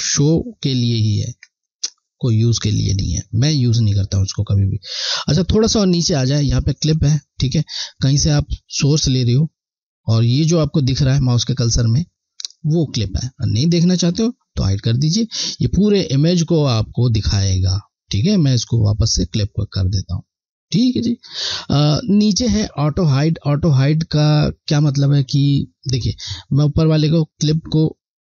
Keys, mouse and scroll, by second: 4.2-5.6 scroll down 1, 8.0 scroll down 1, 8.7 alt+click, 13.9 click, 19.1 click.